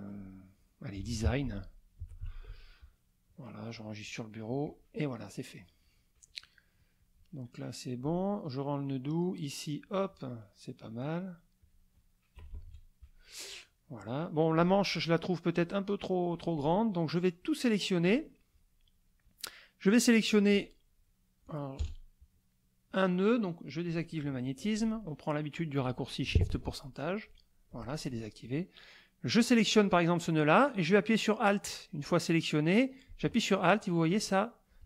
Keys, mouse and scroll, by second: 0.7-2.7 typing, 4.6 click, 5.4 middle click, 7.8 ctrl+click, 9.0 click, 10.8 click, 11.6 click, 12.3 KP_Subtract, 13.2 middle click, 13.8 middle click, 14.6 click, 15.6 click, 16.5-18.2 drag, 21.8 KP_Add, 22.5 middle click, 29.2-34.8 drag.